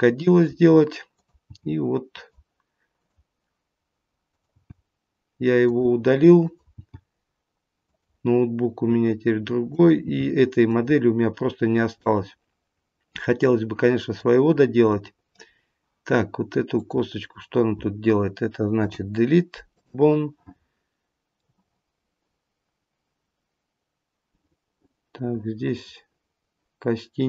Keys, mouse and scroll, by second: 1.0 click, 1.6 g, 2.9 click, 4.2 click, 4.7 g, 6.3 click, 6.9 g, 9.9 click, 10.1 g, 11.2-12.0 scroll down 5, 12.0 middle click, 14.4-15.2 scroll up 4, 16.7 click, 16.7-17.8 scroll down 1, 18.7 Delete, 21.3 middle click.